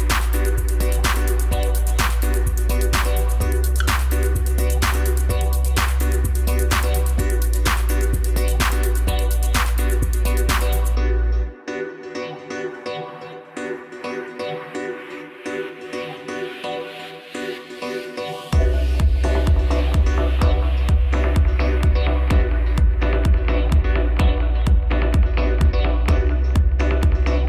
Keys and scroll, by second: 6.4 ctrl++, 11.3 u.